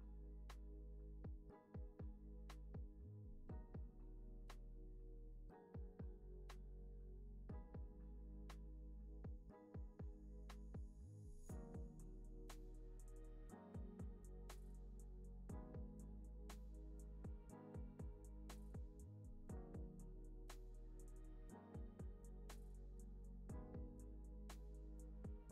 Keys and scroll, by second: 24.8 super+s.